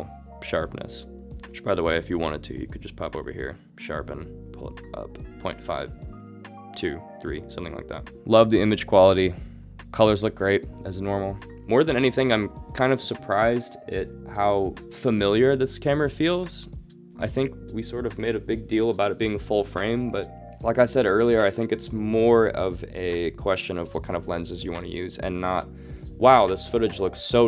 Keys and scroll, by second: 1.5 alt+s.